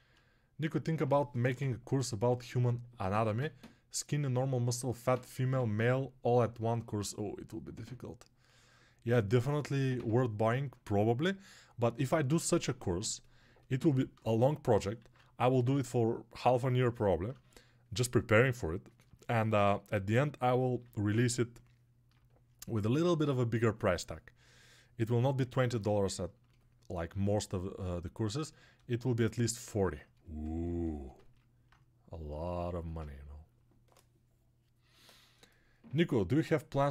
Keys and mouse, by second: 12.9-26.1 alt+drag, 27.8-36.9 alt+shift+drag.